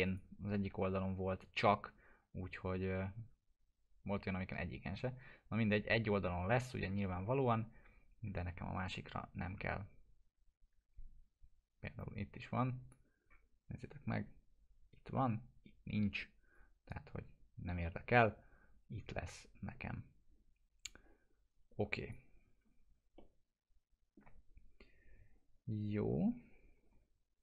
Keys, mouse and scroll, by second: 0.0 click, 0.9 Right, 12.0-12.9 drag, 13.3 scroll up 1, 16.5 scroll up 1, 16.8-17.2 drag, 20.9-22.4 drag, 23.2-24.4 alt+middle drag, 26.6 scroll up 1.